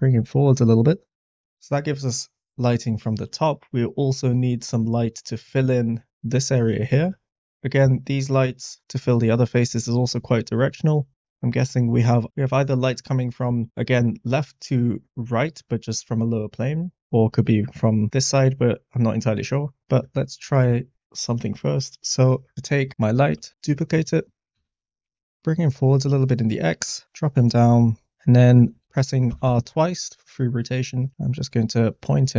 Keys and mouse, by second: 0.6 click, 4.6 middle click, 19.8 middle click, 20.5 middle click, 22.5 middle click, 23.5 shift+d, 24.2 g, 24.5 x, 26.2 middle click, 27.2 g, 27.2 z, 28.1-28.6 middle drag, 29.2 r, 29.4 r.